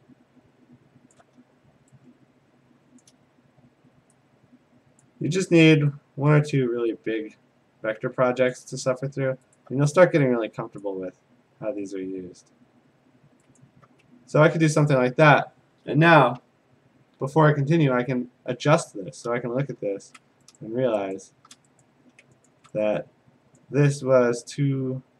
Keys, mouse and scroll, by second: 1.1 click, 3.0 ctrl+click, 5.0 click, 7.0 click, 8.5 ctrl+click, 9.6 alt+click, 10.8 click, 12.7 click, 13.9 alt+click, 14.8 click, 19.6 click, 19.8 a, 20.6 click, 21.2 shift+click, 21.8 click, 22.5 ctrl+click, 23.6 click.